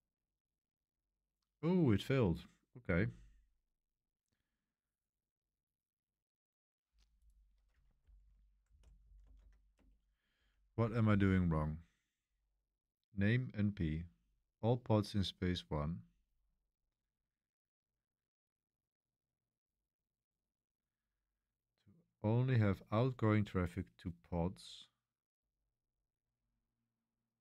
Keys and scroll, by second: 7.9-11.7 typing, 14.0 j, 15.8-16.5 typing, 22.6 j, 25.4-26.2 typing.